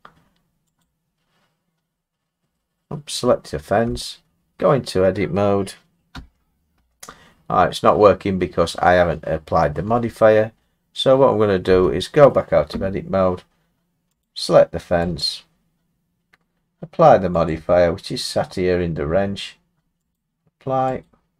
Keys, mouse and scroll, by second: 0.8 click, 1.9 middle click, 2.0 middle click, 2.5 middle click, 2.7 middle click, 3.8 Tab, 6.1 Tab, 6.7 Tab, 9.8 Tab, 10.5 middle click, 10.5 middle click, 10.6 middle click, 11.7 Tab, 14.2 click, 15.2 click, 17.5 click, 20.1 click, 21.0 click.